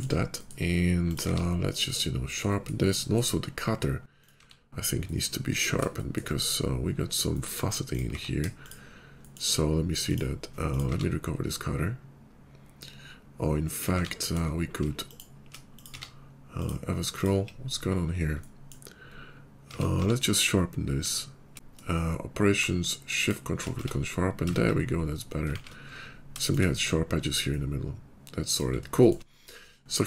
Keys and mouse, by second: 0.9 click, 1.2 q, 2.4-6.1 drag, 4.3 q, 6.1-7.2 middle drag, 7.3-8.0 drag, 8.0 q, 10.6 click, 10.8 q, 13.6 click, 13.9 q, 15.7 click, 15.8 q, 17.6 /, 19.6 Tab, 19.9 q, 21.5 Tab, 23.7 Tab, 24.3 Tab, 24.7 /, 24.8-25.6 middle drag, 25.4 shift+2, 26.1-26.5 shift+middle drag, 28.4-30.0 middle drag.